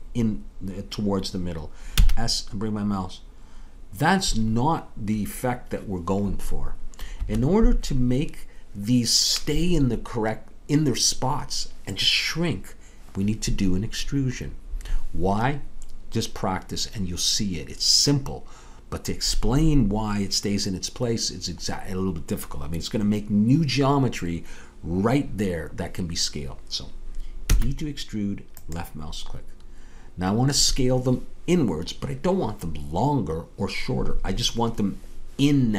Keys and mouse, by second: 2.0 s, 27.5 e.